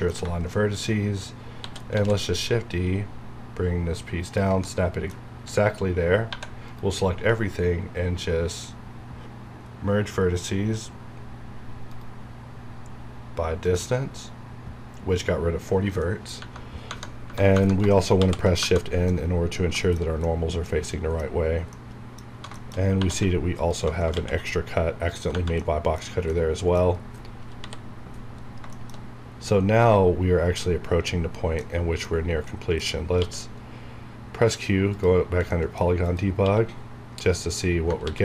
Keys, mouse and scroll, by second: 1.6 shift+d, 1.9 z, 4.2 ctrl+click, 4.6 middle click, 5.3 a, 6.3 a, 6.6 right click, 11.9 right click, 13.5 click, 14.9 scroll down 1, 16.0 middle click, 18.1 shift+n, 19.1-20.8 middle drag, 20.8 middle click, 21.4 scroll down 1, 21.7 middle click, 22.3-22.9 scroll up 2, 22.5 shift+middle click, 23.6 alt+click, 24.1 ctrl+x, 24.7 scroll down 1, 25.6 middle click, 26.0 scroll down 1, 26.3 middle click, 26.9-27.4 scroll down 1, 27.4 KP_7, 28.4 scroll up 1, 28.7 shift+middle click, 28.9 shift+scroll up 1, 30.1 scroll up 1, 30.8 scroll down 1, 31.6-33.1 middle drag, 33.1 q, 34.8 click, 35.5 middle click, 36.0 click, 36.4 q, 37.4 click, 38.0 ctrl+s.